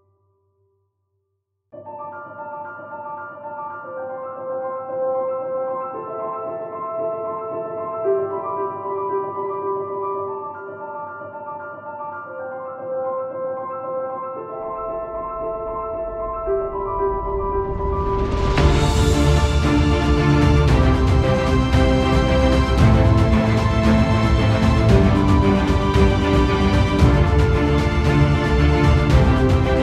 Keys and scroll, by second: 2.3 ctrl+z, 2.6 ctrl+=, 3.2 space.